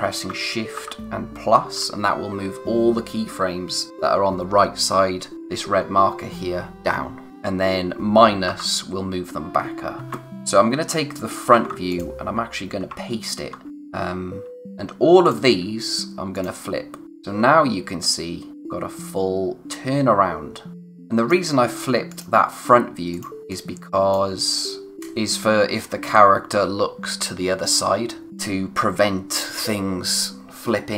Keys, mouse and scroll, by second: 10.0 ctrl+z, 10.3 click, 11.5 ctrl+c, 11.9 click, 15.2 click.